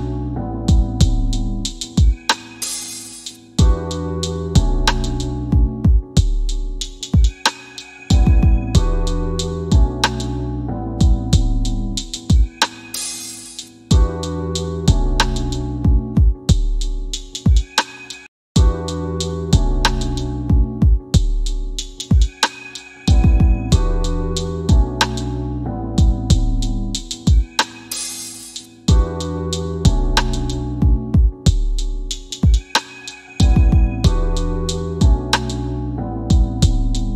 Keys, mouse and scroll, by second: 0.7 KP_7, 2.1 click, 3.1 KP_4, 4.7 click, 9.6 KP_2, 13.0 click, 17.2 BackSpace, 17.4 KP_0, 19.0 click, 31.7 scroll up 1, 32.4 c, 33.7 f, 36.9 click.